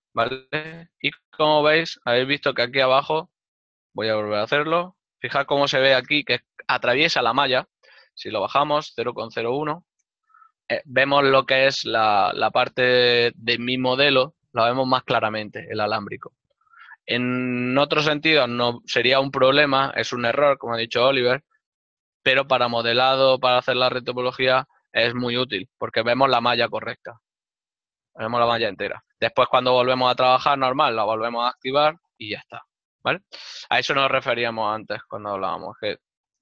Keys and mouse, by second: 1.7 shift+middle click, 7.0 Return, 23.4 middle click, 29.1 Return, 33.0 ctrl+middle click, 35.6 Tab.